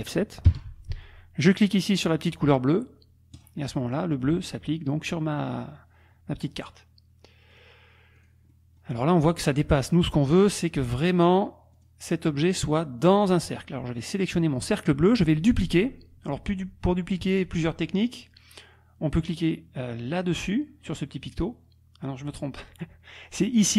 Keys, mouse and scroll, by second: 0.6 F7, 3.5 click, 7.5 click, 8.2 click, 11.8 click, 14.1 click.